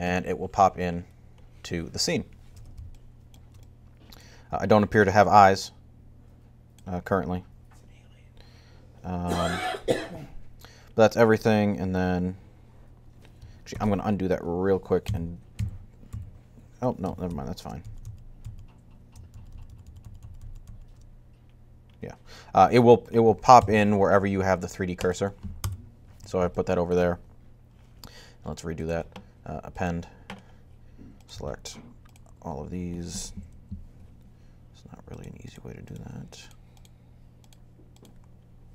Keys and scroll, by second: 13.6 super+z, 14.8-15.9 typing, 17.1 shift+super+z, 17.6 super+z, 17.8-20.3 typing, 23.4 7, 25.2-25.9 typing, 33.1 Down.